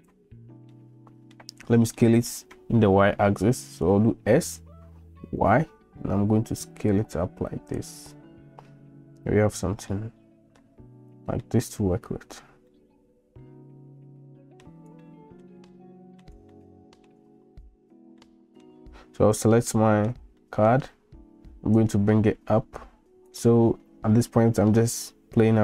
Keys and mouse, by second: 0.7-1.4 middle drag, 2.0 shift+middle drag, 4.2 s, 9.9-10.6 middle drag, 11.4 middle click, 12.7-14.6 middle drag, 15.1-15.5 shift+drag, 15.7-16.3 drag, 16.5-17.1 shift+drag, 18.3 middle click, 19.7-20.1 middle drag, 20.4 shift+middle click, 21.8-23.4 drag, 24.2-24.8 shift+middle drag.